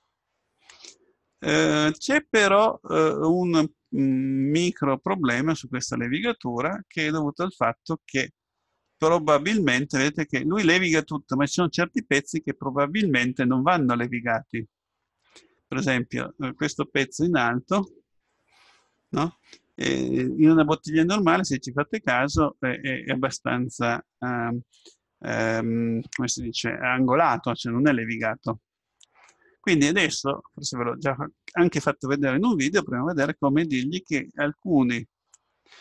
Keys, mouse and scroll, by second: 2.8-4.4 middle drag, 6.1-7.5 scroll up 1, 7.5 scroll up 1, 7.7-11.5 middle drag, 11.5-13.3 scroll up 1, 15.7-19.0 middle drag, 19.0-20.1 scroll up 1, 20.1 scroll up 1, 33.3 Tab.